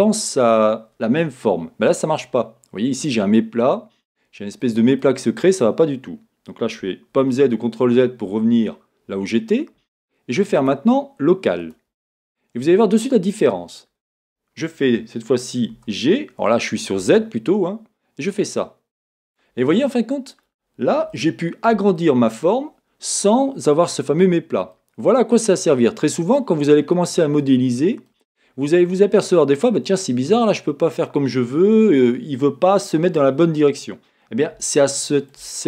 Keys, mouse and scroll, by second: 3.6 scroll, 7.2 z, 10.5 middle click, 10.6-12.6 drag, 12.6 middle click, 12.9-15.6 middle drag, 15.7 g, 19.4 click, 19.7 middle click, 21.4-22.7 middle drag, 23.6-24.9 middle drag, 25.3-35.6 middle drag, 26.8-27.4 scroll down 2.